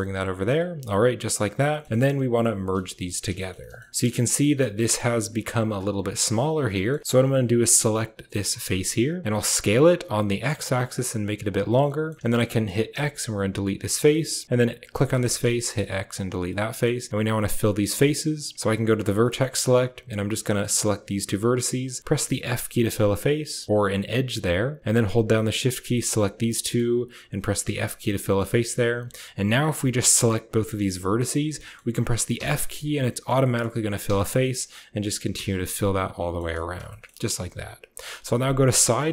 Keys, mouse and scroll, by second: 0.0-0.2 typing, 0.7 click, 1.6 shift+click, 1.7 middle click, 1.8 shift+middle click, 2.6 shift+middle click, 2.8 middle click, 2.9 click, 3.3 shift+middle click, 3.5 middle click, 3.9 middle click, 4.3 middle click, 4.6 middle click, 5.1 click, 5.5 click, 5.6 middle click, 6.4 click, 6.6 middle click, 7.5 middle click, 9.2 s, 11.7 click, 12.4 click, 12.8-13.8 typing, 14.0 click, 14.8 click, 15.1 shift+click, 15.5-16.1 typing, 16.4 click, 18.8 click, 19.1 middle click, 20.0 click, 20.2 middle click, 20.9 shift+click, 21.2 middle click, 21.9 shift+click, 22.3 f, 22.5 click, 25.7 shift+click, 26.4 click, 27.5 f, 27.9 click, 28.4 shift+click, 30.2 shift+click, 31.4 click, 32.2 f, 32.6 click, 33.3 click, 33.9 f, 34.3 click, 35.2 f, 35.6 click, 36.8 shift+click, 37.0 click, 37.9 KP_3, 38.6 shift+click.